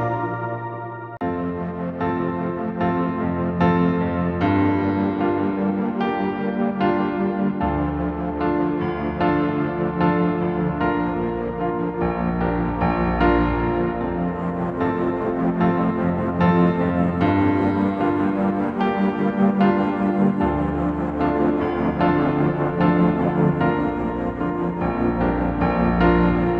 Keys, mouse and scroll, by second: 3.8 double click, 5.0 typing, 5.3 double click, 13.3 alt+click, 18.1 double click, 20.7-21.8 typing, 26.2-26.5 typing.